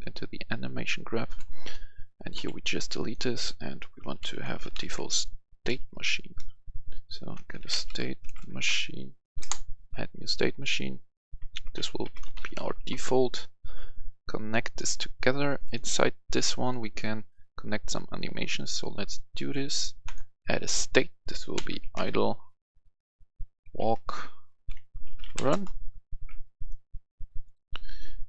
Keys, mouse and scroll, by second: 1.6 right click, 2.3 Delete, 2.9 right click, 3.9-4.9 typing, 6.3-8.6 typing, 9.3 Return, 10.5 click, 10.8 F2, 11.5-12.6 typing, 12.7 Return, 13.8-15.0 drag, 16.6 right click, 18.3 click, 21.5-22.0 typing, 23.9-25.3 typing, 25.4 Return, 27.1-28.2 drag.